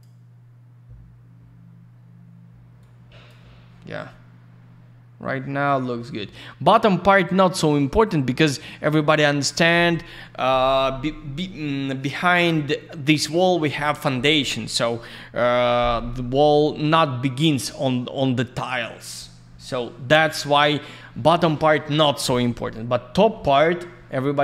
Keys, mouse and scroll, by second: 2.8 click, 19.1 scroll down 1.